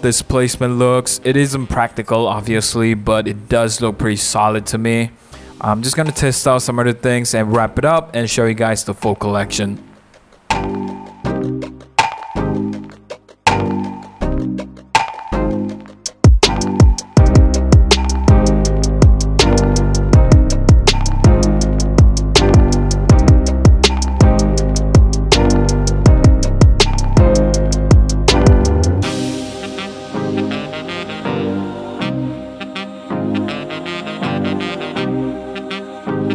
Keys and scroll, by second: 0.0-0.5 typing, 0.6 Return, 2.6-4.1 typing, 5.2 super+a, 5.2 typing, 6.6 super+d, 10.9-12.6 typing, 14.0 v, 17.1 super+-, 17.3 super+0, 18.6 super+t, 18.9 Return, 20.6 shift+Left, 20.9 shift+Down, 21.7 super+-, 21.9 super+0, 23.0 super+-, 26.0 super+-, 26.8 super+t, 27.1 Return, 29.9 super+t, 30.2 super+z, 30.7 Return, 31.3 super+t.